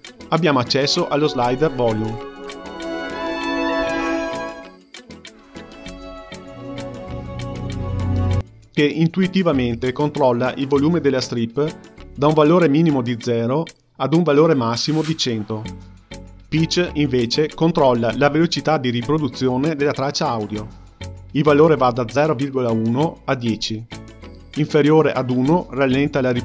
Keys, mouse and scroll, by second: 0.6 space, 2.2-8.2 drag, 8.2 space, 16.3-26.4 drag.